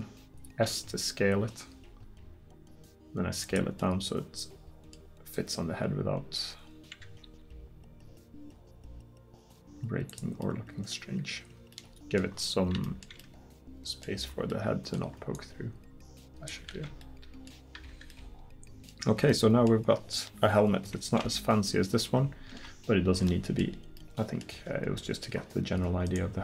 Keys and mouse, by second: 0.5 s, 7.3 s, 14.1 middle click, 16.8 ctrl+z, 17.8 Tab, 18.4-18.7 middle drag, 19.2-20.3 middle drag, 25.8 Tab.